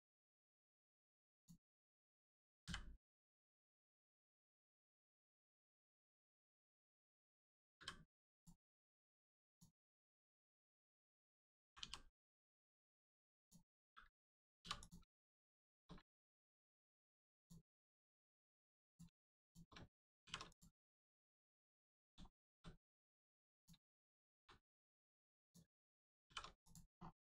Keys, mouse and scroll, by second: 1.4 shift+click, 2.6 m, 3.4 click, 4.5 shift+middle click, 6.2 shift+click, 7.8 m, 8.4 click, 10.5 click, 11.6 g, 13.4 click, 15.6 shift+click, 16.0 x, 17.4 click, 17.8 shift+middle click, 18.9 middle click, 19.4 shift+click, 20.2 shift+r, 20.5 click, 20.8-21.3 scroll down 1, 21.6 middle click, 22.3 shift+middle click, 22.8 scroll up 1, 23.6 click, 24.6 click, 25.4 shift+click, 26.2 shift+r, 26.6 click, 26.9 scroll down 1.